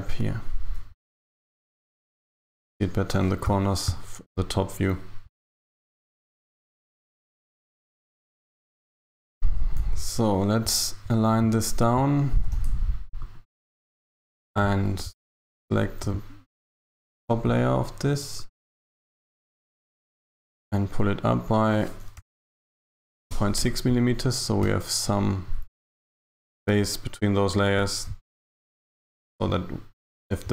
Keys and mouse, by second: 2.3 shift+KP_7, 9.1 Tab, 9.8 KP_1, 12.4 g, 14.3 Tab, 18.4 click, 19.3 a, 19.5 a, 19.8 b, 22.3 g, 24.7 Tab.